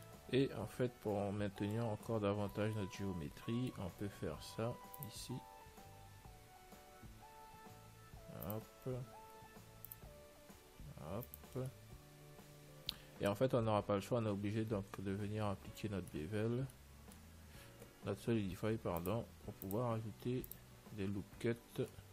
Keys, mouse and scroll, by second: 0.7-2.4 middle drag, 2.4 Tab, 3.0-5.1 middle drag, 5.0 ctrl+r, 9.8 ctrl+r, 12.4-13.9 middle drag, 16.6 Tab, 16.9-18.8 middle drag, 19.3-22.1 drag, 21.9 Tab.